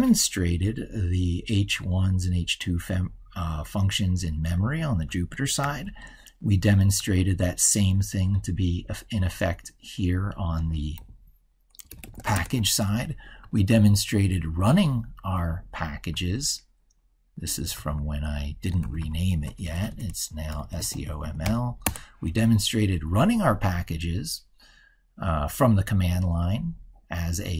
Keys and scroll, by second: 5.4 ctrl+super+Right.